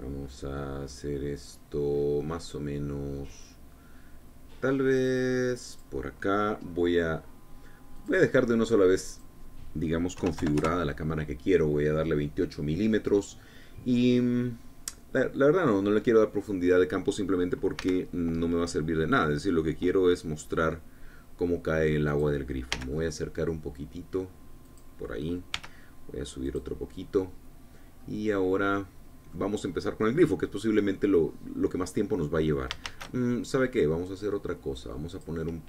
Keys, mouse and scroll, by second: 6.3 click, 8.6 click, 9.7-10.8 drag, 10.8 KP_2, 11.0 KP_8, 11.2 KP_Enter, 18.4 g, 22.7 click, 23.3 g, 23.4 click, 25.3 click, 26.2 g, 27.1-28.1 drag, 28.1-28.5 scroll down 1, 28.6-28.9 scroll up 2, 29.3 click, 29.9-30.9 scroll down 2, 30.9-33.3 drag, 33.5 shift+a.